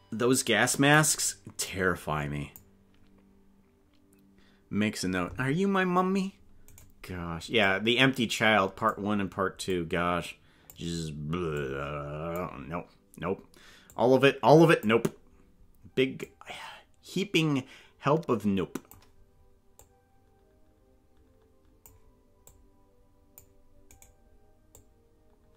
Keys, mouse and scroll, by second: 1.7 click, 6.7 right click, 7.6-8.9 drag, 9.7-10.7 drag, 11.5 click, 13.9-14.9 drag, 16.3-18.7 drag, 19.7-21.9 drag, 22.5 click, 24.0 right click, 24.7 click.